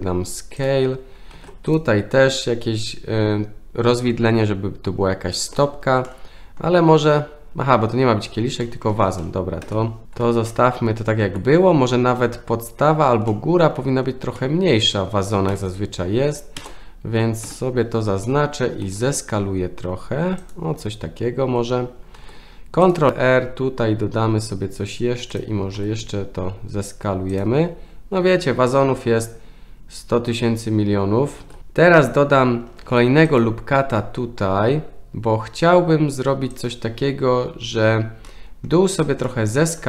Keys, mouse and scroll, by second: 1.3 ctrl+r, 6.0 middle click, 8.6 middle click, 9.6 KP_1, 10.4 shift+middle click, 13.2 middle click, 14.3 middle click, 15.5 3, 15.5 click, 16.5 ctrl+KP_Add, 17.4 KP_1, 18.8 s, 22.1 ctrl+r, 25.8 s, 31.4 ctrl+r, 31.6 ctrl+z, 32.9 ctrl+r, 38.3 middle click, 39.3 middle click.